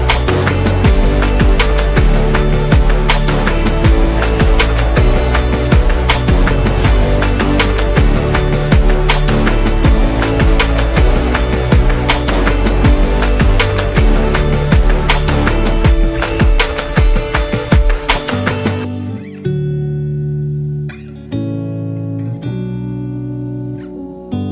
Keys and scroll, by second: 1.0 Tab, 2.1 typing, 4.8 z, 5.8 v, 7.0 m, 8.8 v, 14.9-16.6 typing, 18.0 typing.